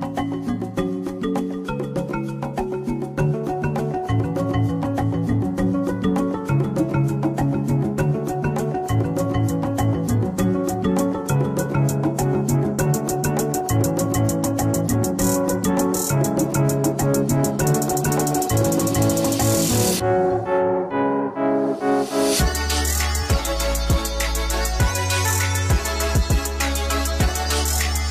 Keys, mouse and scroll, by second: 0.7 click, 0.7 KP_2, 0.8 middle click, 0.9 KP_Enter, 0.9 click, 1.0 middle click, 2.0 KP_Enter, 2.0 click, 2.0-4.0 shift+middle drag, 2.2 scroll up 1, 3.0 KP_0, 4.0 right click, 4.2 shift+s, 4.2 shift+click, 4.9 g, 5.1 click, 5.9 g, 6.7 click, 6.9 shift+d, 7.6 KP_Enter, 7.7 r, 7.9 KP_Enter, 8.6 click, 8.8 shift+middle click, 9.5 g, 9.8-10.4 scroll down 1, 10.4-12.4 middle drag, 10.4 scroll up 2, 11.1-11.8 scroll up 2, 11.8 KP_7, 12.4 click, 12.9 middle click, 12.9 g, 13.0 right click, 13.4 scroll down 1, 14.9 Tab, 15.3 ctrl+z, 15.4 right click, 15.5 g, 15.6 click, 16.1 alt+d, 16.1 right click, 16.3 middle click, 16.3-16.8 scroll, 16.8 click, 17.6 g, 17.7 click, 18.3 KP_3, 18.4 g, 18.9 middle click, 19.1 Tab, 19.2 middle click, 19.2 s, 19.4 alt+shift+click, 19.5-20.4 scroll up 1, 20.4 middle click, 20.5 scroll down 1, 20.7 middle click, 20.8 s, 21.6 click, 22.7-24.3 shift+middle drag, 23.7 scroll up 2, 23.8-24.3 scroll down 2, 24.3 click, 24.4 BackSpace, 24.6 Return, 25.9-28.1 middle drag, 25.9-26.3 scroll, 26.3-26.7 scroll up 2, 26.7 click, 27.1 Tab, 27.2 a, 27.8 Tab.